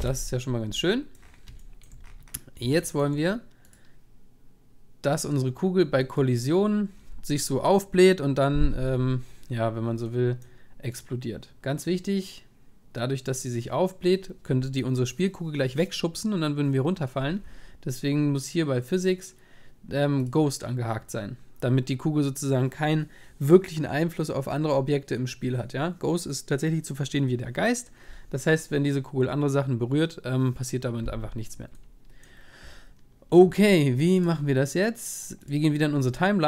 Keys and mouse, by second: 0.7-4.1 middle drag, 5.1-8.9 drag, 6.0 middle drag, 31.8-34.2 middle drag, 34.2-36.4 drag.